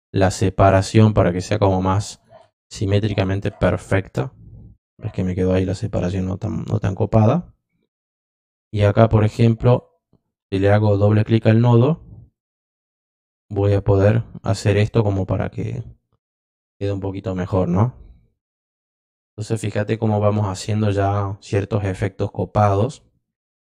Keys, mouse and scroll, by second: 2.1 click, 7.1 click, 9.6 click, 10.8 click, 11.5 click, 12.3-15.5 drag, 16.3 click.